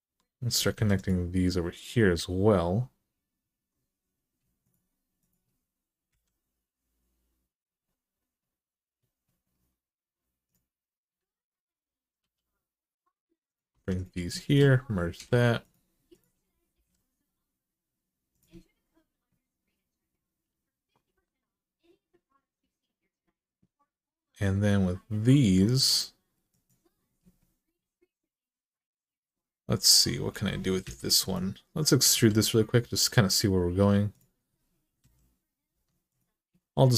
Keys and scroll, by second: 0.5 2, 5.9 f, 12.0 e, 13.5 1, 14.9 m, 16.5 g, 30.6 2, 31.9 e, 34.8-35.5 typing.